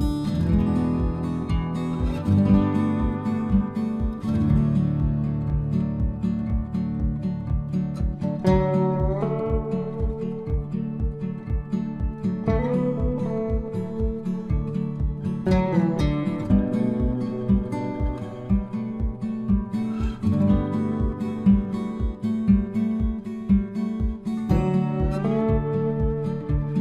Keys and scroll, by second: 10.4 Delete, 24.0 ctrl+c, 24.8 alt+Tab.